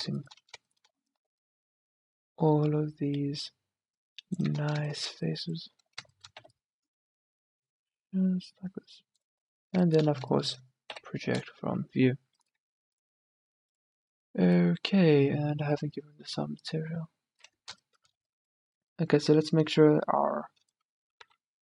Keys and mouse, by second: 1.4 c, 4.6-6.4 middle drag, 6.5 c, 11.0 u, 21.3 s.